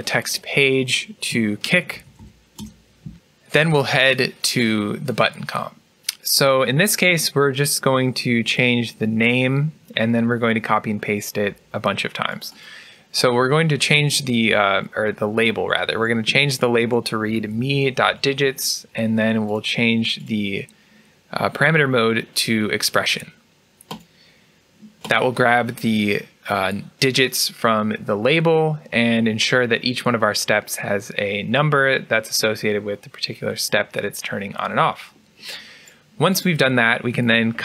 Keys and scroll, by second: 1.6-3.0 typing, 16.7 BackSpace, 37.5 ctrl+c.